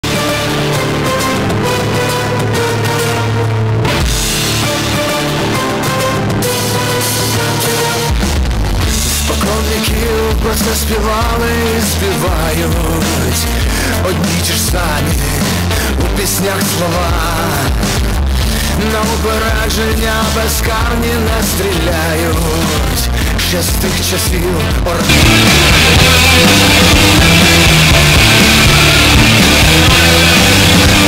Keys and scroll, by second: 0.1 ctrl+q, 2.3 g, 2.7 Down, 3.3-4.3 Down, 4.3 Return.